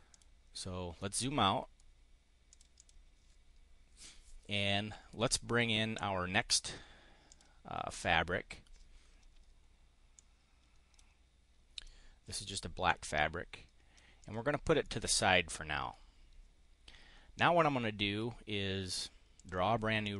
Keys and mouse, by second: 0.2 click, 1.1 click, 2.4 click, 5.2-6.3 drag, 7.2 click, 10.0 click, 11.6 click, 12.8-14.0 drag, 14.1 click, 14.8 click, 19.3 click, 20.0-20.1 drag.